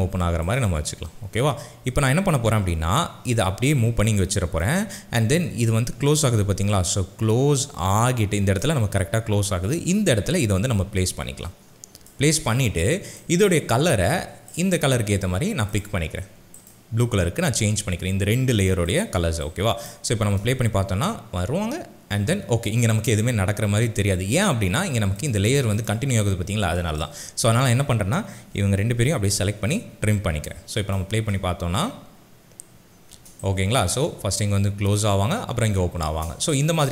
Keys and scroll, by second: 20.1 space, 29.5 alt+], 31.1 space, 33.9 space, 36.1 space.